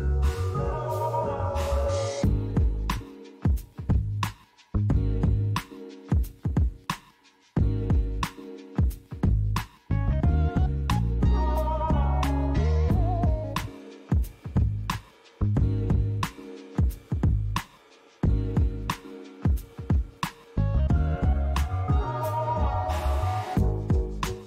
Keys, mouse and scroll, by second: 0.6 ctrl+b, 3.8 click, 4.9 click, 5.6 click, 6.3 click, 8.6 g, 9.2 z, 10.1 right click, 10.9 click, 12.2 g, 12.6 z, 13.8 click, 14.5 click, 15.7 g, 16.3 z, 17.9 click, 18.3-19.6 scroll down 1, 19.6 Tab, 20.4 s, 21.9 click, 22.2 s, 22.4 z, 23.6 click.